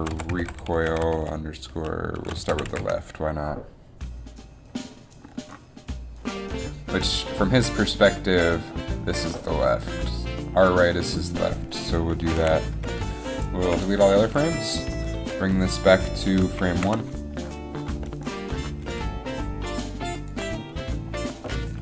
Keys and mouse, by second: 10.0 middle click, 12.6 a, 13.0 b, 13.7 Delete, 15.2 g, 16.9 shift+Left, 19.0 g.